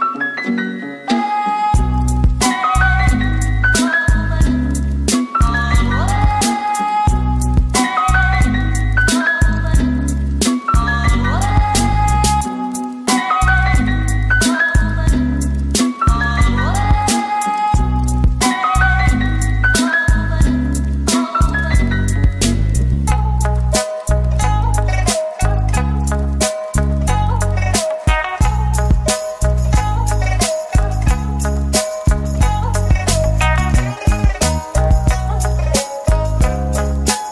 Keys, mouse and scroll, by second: 0.7 typing, 1.9 typing, 3.4 typing, 4.0 middle click, 7.9 typing, 8.9 typing, 10.3 typing, 11.7-14.1 typing, 15.3 typing, 16.4 typing, 17.6-19.0 typing, 20.0 middle click, 21.0-22.0 typing, 22.5 middle click, 23.9 ctrl+l, 24.3-25.2 typing, 25.6 middle click, 27.0 ctrl+l, 27.6 typing, 29.2-30.0 typing, 31.5 typing, 34.2 middle click, 35.6 ctrl+l, 36.3 s.